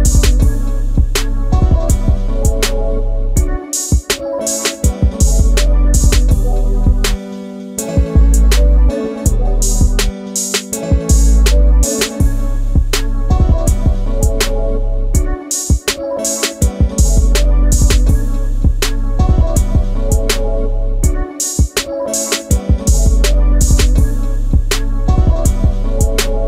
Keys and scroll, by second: 3.1 alt+t, 8.8 g, 9.9 f, 14.3 space.